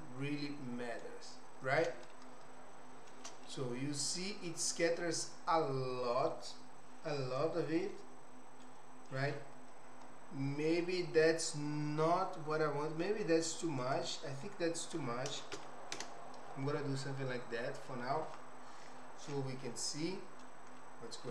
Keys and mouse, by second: 2.5 shift+middle click, 4.0-5.1 middle drag, 13.8-18.2 drag, 19.7 middle click.